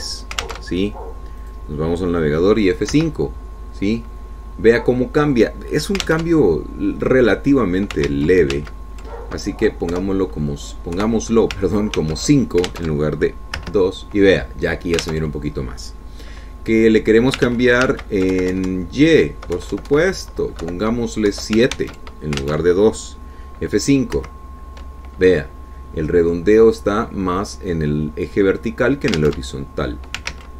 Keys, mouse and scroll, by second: 0.7 alt+Tab, 2.0 alt+Tab, 3.0 click, 4.4 F5, 7.7 alt+Tab, 9.6 ctrl+z, 11.4 Delete, 12.5 KP_5, 13.5 ctrl+s, 14.3 alt+Tab, 15.1 F5, 16.6 alt+Tab, 19.0 ctrl+z, 19.9 ctrl+Right, 22.1 Delete, 22.8 KP_7, 23.3 ctrl+s, 24.0 alt+Tab, 25.7 F5.